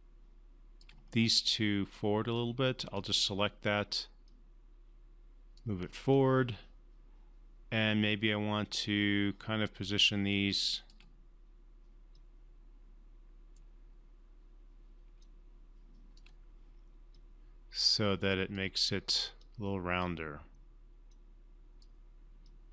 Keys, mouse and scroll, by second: 2.3-2.9 drag, 4.4-5.8 drag, 6.1-11.1 alt+drag, 15.2-16.4 alt+drag.